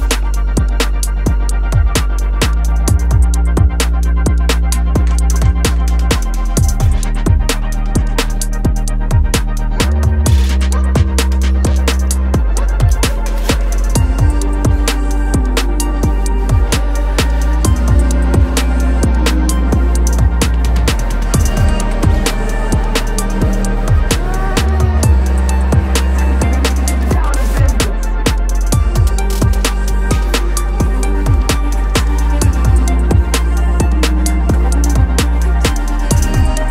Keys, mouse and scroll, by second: 0.4 click, 1.1 s, 4.7-7.3 right drag, 7.8-10.4 right drag, 11.6 shift+a, 12.5 s, 14.7-15.3 middle drag, 15.3 click, 16.0 scroll up 5, 16.5-17.3 middle drag, 17.3 g, 19.6-20.1 scroll up 1, 20.1-21.8 middle drag, 21.8 r, 23.7-25.3 middle drag, 25.3 r, 28.9 g, 33.5-35.6 middle drag, 35.6 click.